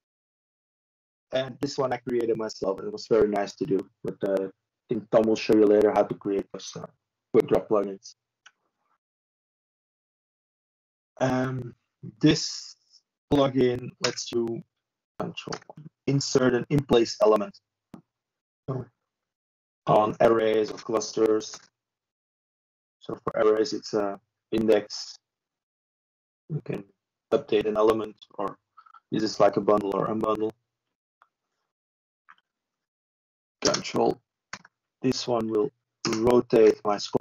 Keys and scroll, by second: 3.6 typing.